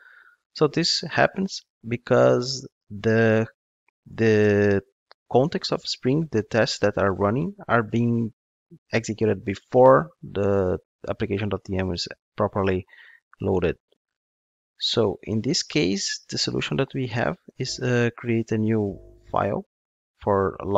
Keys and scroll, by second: 17.5 super+n.